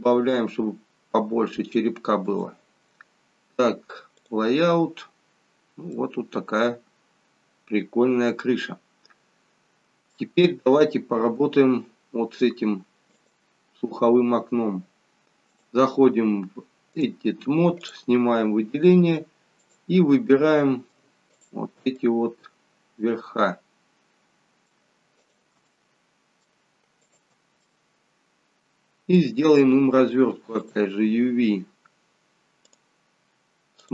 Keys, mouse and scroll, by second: 4.5 click, 5.4-6.1 scroll up 2, 5.9 middle click, 9.2-9.8 scroll down 2, 10.2 shift+middle click, 11.1-11.8 scroll up 2, 12.1-12.4 scroll up 1, 13.2 click, 15.5 click, 19.6 click, 20.3 middle click, 21.3 shift+click, 22.1 middle click, 25.3 shift+click, 25.7 middle click, 27.2 shift+click, 27.7 middle click.